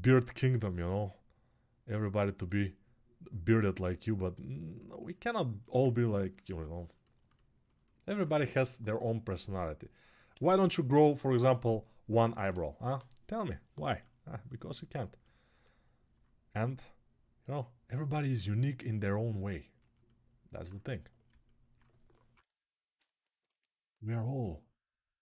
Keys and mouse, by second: 19.7-24.8 alt+right drag, 22.6 [, 24.8 click.